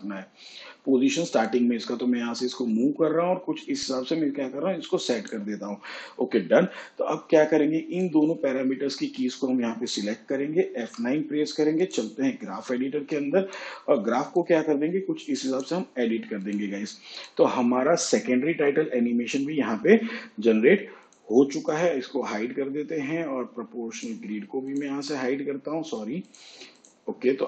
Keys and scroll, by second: 12.2 F9.